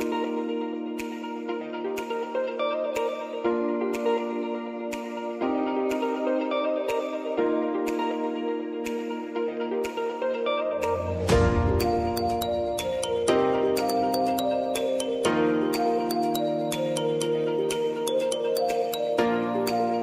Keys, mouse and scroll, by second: 0.7 click, 5.0 space, 6.8 click, 7.7 [, 8.1 space, 9.7 click, 10.2 u, 10.7 click, 11.0 space, 13.5-20.0 drag.